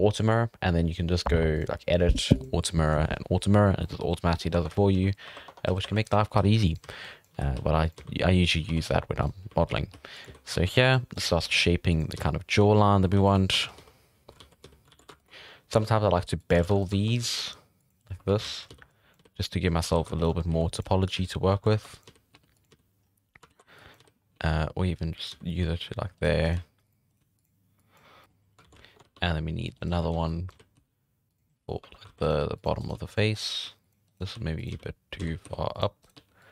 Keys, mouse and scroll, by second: 1.5 click, 2.3-3.5 drag, 3.5 scroll down 5, 3.8 scroll up 1, 3.8 middle drag, 4.4 scroll up 1, 4.5 Tab, 4.7-12.1 typing, 5.5 Tab, 5.9 right click, 7.0-7.3 drag, 8.7 alt+a, 9.2 right click, 11.1 right click, 12.6 Tab, 12.7 scroll down 4, 12.8 middle drag, 13.1 alt+a, 13.5 Tab, 13.6 scroll up 1, 13.8 z, 14.4 alt+a, 14.6 z, 14.9 alt+a, 15.2 alt+shift+right drag, 15.7 ctrl+b, 16.5 alt+a, 16.8 alt+shift+right drag, 17.2 ctrl+b, 18.0 middle drag, 18.2 1, 18.4 alt+a, 18.6 scroll up 2, 18.7 z, 18.9 drag, 19.1 z, 19.8 alt+a, 20.2 alt+shift+right click, 20.3 scroll down 1, 20.5-22.7 typing, 21.5 alt+a, 21.8 drag, 23.0-23.5 scroll up 2, 23.5 alt+a, 23.7 drag, 24.0-27.2 typing, 26.4 right click, 27.1 right click, 27.8 click, 28.2 middle click, 28.3 scroll up 1, 28.6 alt+a, 29.0 ctrl+r, 29.9 1, 30.1 z, 30.3 click, 30.5 z, 30.7 g, 31.8-36.5 typing, 32.0 alt+a, 32.2 right click, 32.8 right click, 33.3 right click, 34.0 right click, 36.0 right click.